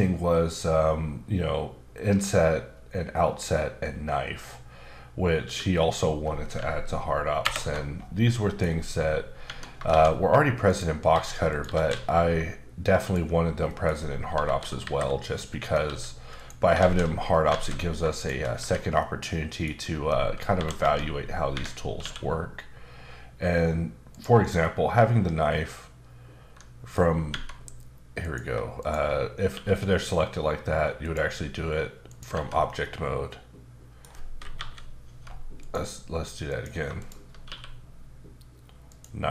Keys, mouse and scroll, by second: 5.4 q, 7.4 ctrl+alt+KP_Add, 8.2 middle click, 9.4 Tab, 9.9 shift+a, 10.6 click, 11.1 s, 11.5 click, 11.6 g, 13.0 click, 13.4 scroll down 1, 13.7 middle click, 14.4 KP_7, 15.5 scroll up 2, 15.8 s, 16.3 click, 16.7 alt+z, 17.5 alt+z, 18.1 click, 18.6 Tab, 19.0 middle click, 20.5 KP_7, 20.8 space, 21.5 Escape, 22.0 q, 24.6 middle click, 27.3 Tab, 28.2 click, 28.8 shift+click, 29.5 q, 31.0 click, 32.1 click, 32.3 Tab, 32.8 middle click, 34.5 KP_7, 35.0 Tab, 35.6 click, 36.5 click, 36.9 shift+click, 37.3 click, 37.4 q, 38.9 click.